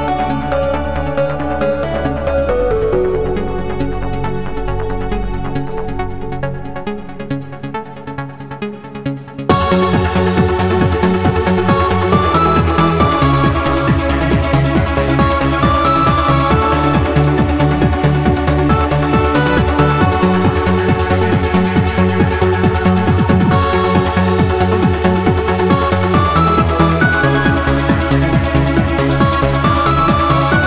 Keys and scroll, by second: 0.3 super+j, 1.7 super+n, 2.7 n, 9.7 w, 12.3 q, 18.7 w, 19.0 q, 26.7 q.